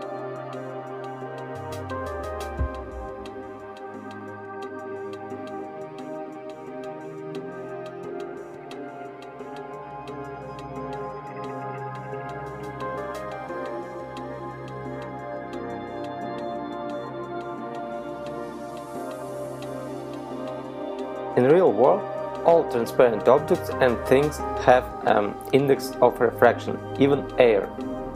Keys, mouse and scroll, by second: 2.4 click, 15.4 right click, 16.7 click, 18.7 right click, 19.6 z, 20.1 right click, 20.9 z, 22.2 click, 23.1 click.